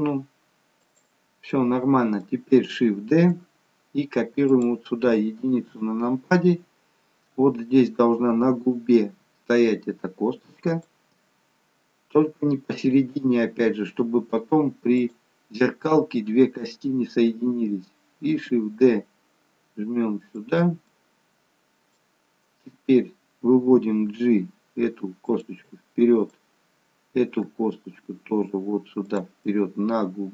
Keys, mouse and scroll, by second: 1.6 middle click, 3.2 shift+d, 5.5 KP_1, 18.5 shift+d, 20.9 middle click, 23.8 g, 26.2 click, 27.6 g, 29.6 middle click.